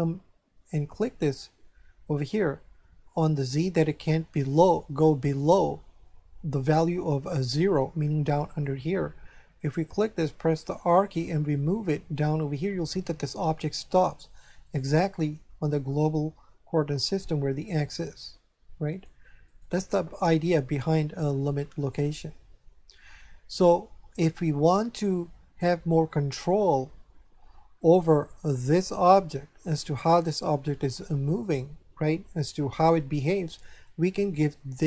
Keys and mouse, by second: 0.9 click, 9.6 right click, 10.7 r, 14.6 right click, 17.9 r, 18.9 right click, 32.8 right click.